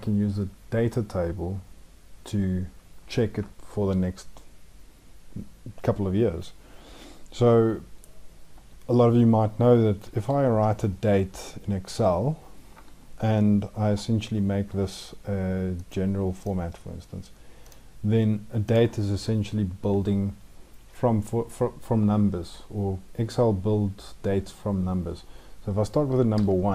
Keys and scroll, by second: 9.9 ctrl+;.